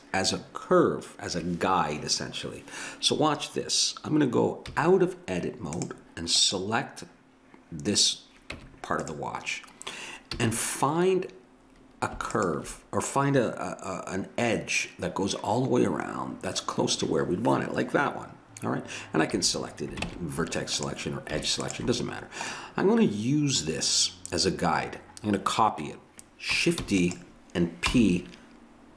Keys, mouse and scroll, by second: 4.7 z, 8.6 Tab, 10.3 a, 19.3 a, 20.1 ctrl+Tab, 26.9 shift+d, 27.9 p.